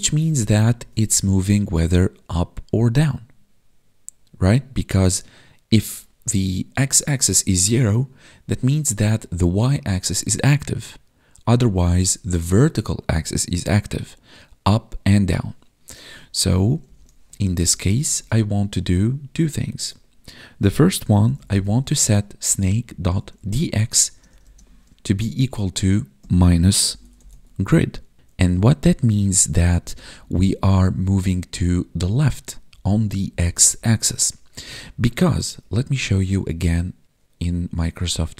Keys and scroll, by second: 0.6 ctrl+s, 16.8 Right, 24.0 space, 24.3 space, 29.0 ctrl+shift+Left, 29.7 ctrl+shift+Left, 31.4 Right, 32.0 Left, 34.5 Right.